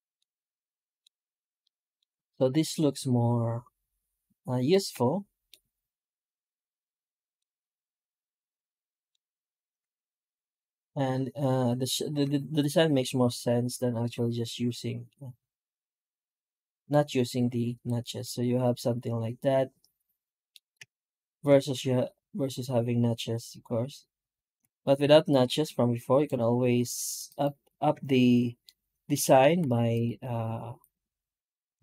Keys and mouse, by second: 0.0-0.8 middle drag, 1.5 middle drag, 1.8 middle click, 4.7 middle click, 5.2 middle click, 7.2-8.8 middle drag, 9.5 F9, 13.0 F9, 18.1-20.3 middle drag, 20.6 F9, 24.8 F9, 27.1 right click, 27.8 Tab, 28.5-29.0 middle drag, 29.4 3, 29.8 right click, 30.6 right click.